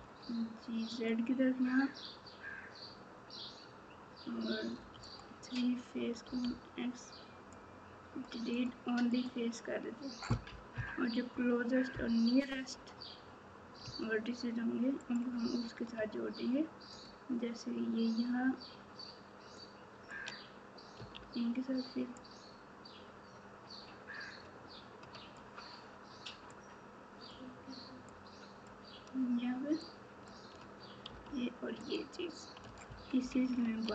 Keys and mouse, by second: 4.7 3, 6.2 x, 10.7 KP_3.